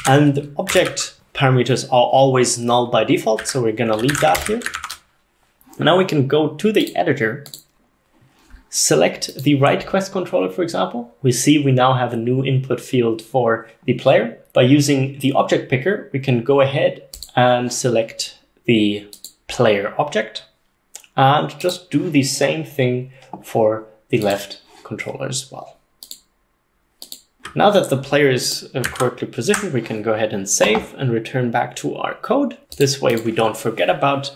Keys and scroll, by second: 0.0 ctrl+alt+0, 0.8 Escape, 0.9 k, 3.4-5.0 typing.